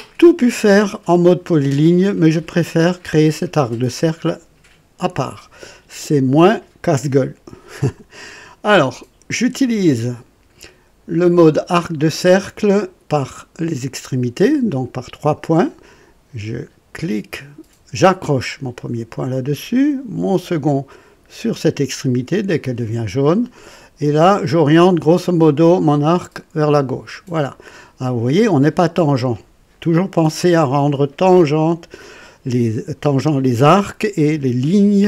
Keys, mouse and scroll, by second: 11.9 click, 15.2 click, 18.7 click, 22.6 click, 26.6 click, 27.4 right click.